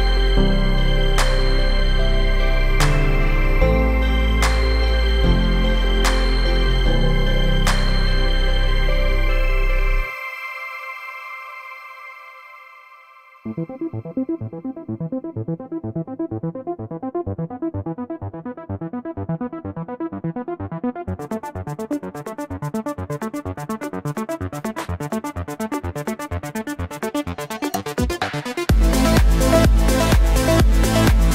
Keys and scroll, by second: 19.4 1, 20.0 0, 21.1 Return.